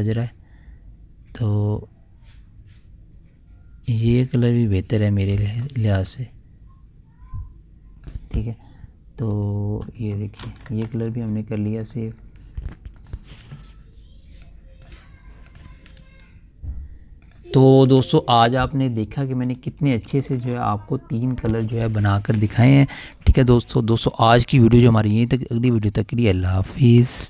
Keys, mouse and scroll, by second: 6.6-9.7 drag, 10.9 ctrl+s, 12.3 click, 20.3-21.0 typing, 22.2 click.